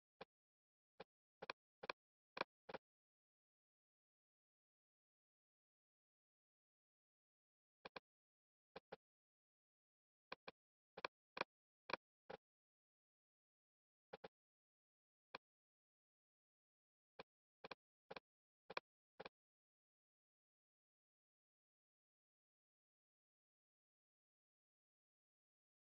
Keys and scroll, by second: 9.5 super+z, 25.8 shift+super+2.